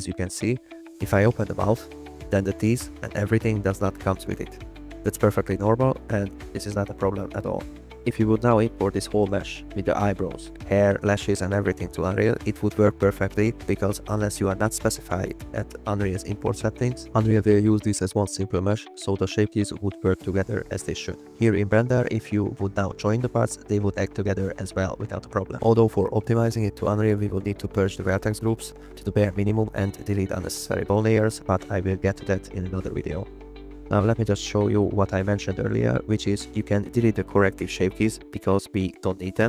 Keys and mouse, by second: 1.6 click, 2.3 middle click, 2.9 click, 6.4 click, 33.9 click.